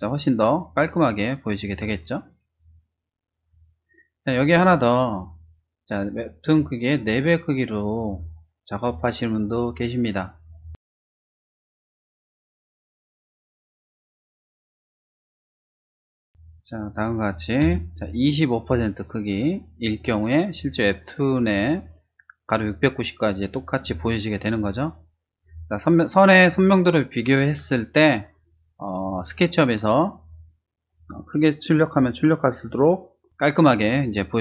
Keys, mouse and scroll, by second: 4.5 click, 7.9-9.9 typing, 11.5 ctrl+n, 11.8 click, 11.9-13.1 typing, 13.4 click, 14.5 click, 15.0 click, 15.4 click, 15.6 ctrl+c, 15.6 click, 15.9 ctrl+v, 16.2 space, 16.2 click, 16.5 click, 18.7 ctrl+space, 19.0 click, 23.8 space, 24.0 click, 24.4 click.